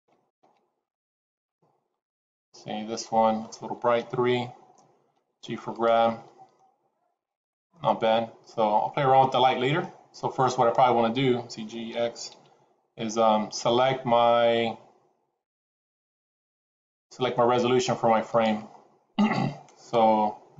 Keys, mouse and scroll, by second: 1.5 middle click, 3.9 KP_3, 5.1 g, 6.0 middle click, 6.6-7.1 scroll up 2, 7.6 middle click, 12.2 g, 18.9-19.9 scroll down 3.